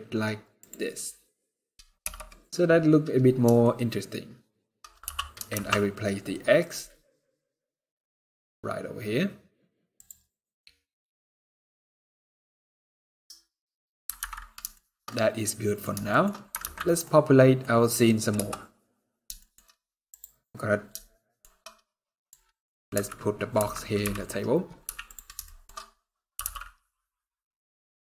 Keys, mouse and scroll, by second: 1.7 KP_0, 3.3 shift+middle click, 5.0 shift+g, 10.1 middle click, 14.4 shift+middle click, 14.8 middle click, 15.8 shift+middle click, 16.0 scroll up 3, 16.5 ctrl+s, 16.7 middle click, 17.3 scroll down 2, 18.0 KP_0, 18.9 shift+scroll down 1, 19.1 shift+middle click, 19.4 scroll up 3, 19.8 click, 20.8 middle click, 21.6 middle click, 22.6 KP_3, 23.2 KP_1, 23.7 KP_Decimal, 24.3 scroll up 4, 24.5 z, 25.1 shift+middle click, 25.4 shift+scroll up 2, 26.0 g.